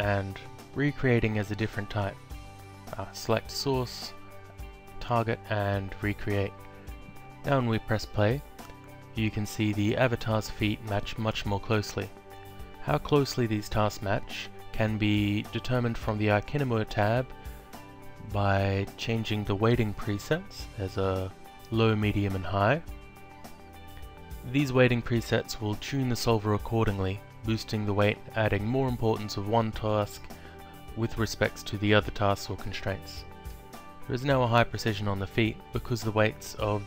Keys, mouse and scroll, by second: 1.1 click, 3.1 click, 4.6 ctrl+click, 5.7 click, 8.2 click, 13.1 click, 15.6 click, 16.9 click, 21.3 click, 22.7 click, 29.0 click, 30.1 click, 32.8 click.